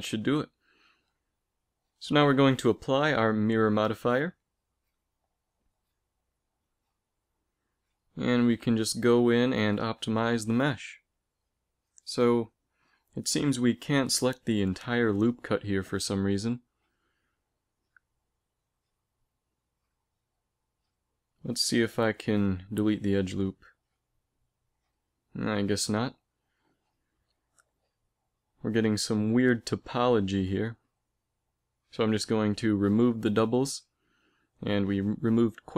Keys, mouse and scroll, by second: 5.9 Tab, 11.2-12.6 middle drag, 12.6 a, 13.5 KP_3, 14.3 z, 14.9 b, 15.9 middle click, 16.5 click, 18.5-20.8 typing, 23.7 middle click, 24.9 ctrl+z, 27.0 g, 28.8 a, 28.9 a, 29.8 space, 33.9 t.